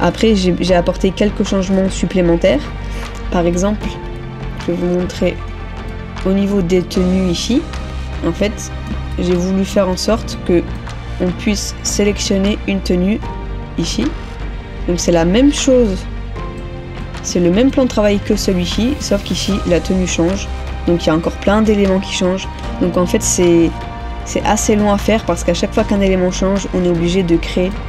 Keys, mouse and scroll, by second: 4.3 ctrl+-, 4.6 ctrl+-, 5.9 middle click, 6.9 middle click, 7.1 ctrl++, 7.4 ctrl++, 7.7 ctrl++, 8.5 middle click, 9.4 ctrl++, 9.7 ctrl++, 15.5 ctrl+-, 16.7 middle click, 23.0 ctrl+-, 23.3 ctrl+-, 24.5 middle click, 25.6 middle click, 25.8 ctrl++, 27.3 middle click.